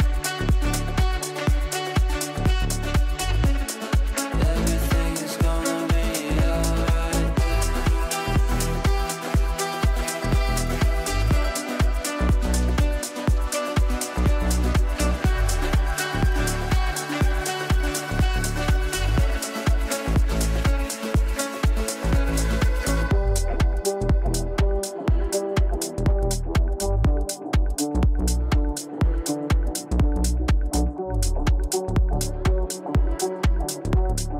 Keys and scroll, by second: 23.9 ctrl+z.